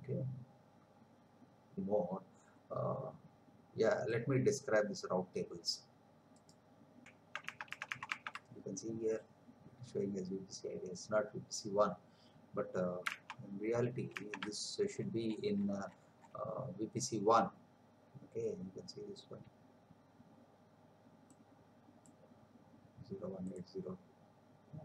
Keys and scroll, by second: 7.3 alt+Tab, 13.3 alt+Tab.